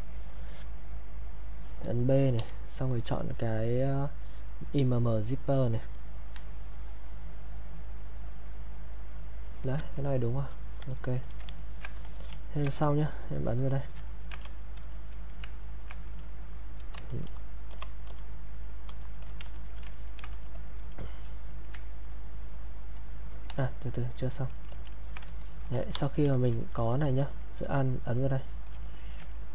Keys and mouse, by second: 2.4 b, 5.1 click, 10.8 click, 11.5 ctrl+right click, 12.1 alt+click, 12.4 ctrl+right click, 13.1 click, 13.7 alt+click, 14.1 ctrl+right click, 14.9 alt+click, 16.2 click, 17.2 shift+f, 19.6 alt+click, 19.9 ctrl+right click, 20.6 alt+click, 23.5 ctrl+z, 25.4 alt+click, 25.9 e, 26.7 alt+click, 28.9 alt+click, 29.3 ctrl+right click.